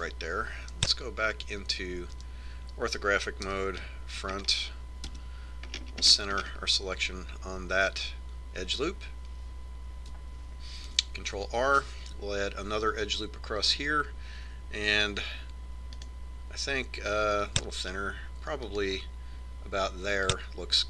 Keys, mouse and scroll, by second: 3.6 KP_5, 4.9 KP_1, 5.6-7.1 middle drag, 6.6 KP_Decimal, 12.4 ctrl+r.